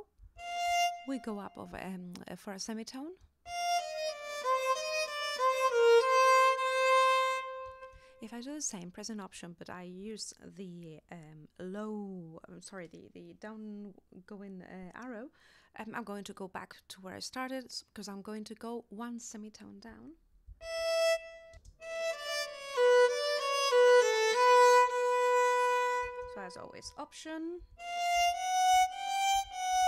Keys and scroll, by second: 0.2 alt+Up, 3.2 space, 7.7 space, 20.5 alt+Down, 21.5 alt+space, 26.0 space, 26.9 alt+space, 27.6 alt+Up, 29.4 alt+Down.